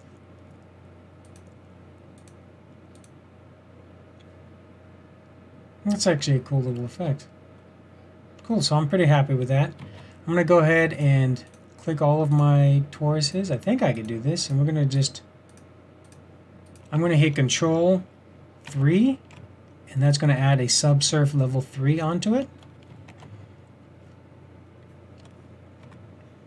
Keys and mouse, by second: 0.0 typing, 1.3-3.2 drag, 9.8 shift+z, 18.8 ctrl+3, 23.4 shift+z, 25.9 Tab.